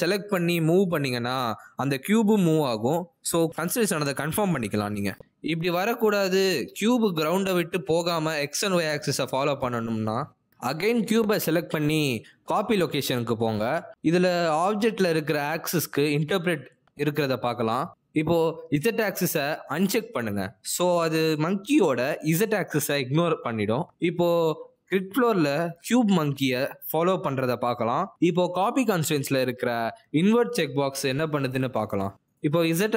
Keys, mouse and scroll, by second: 1.8 click, 2.5 click, 3.1 g, 4.8 s, 5.5 r, 6.7 z, 10.1-12.0 typing, 11.3 click, 11.9 click, 12.3 click, 20.1 click, 20.8 click, 24.1 click, 25.9 click, 26.4 g, 29.3 g, 31.2-31.9 scroll down 2, 31.9-32.2 scroll down 1, 31.9 g.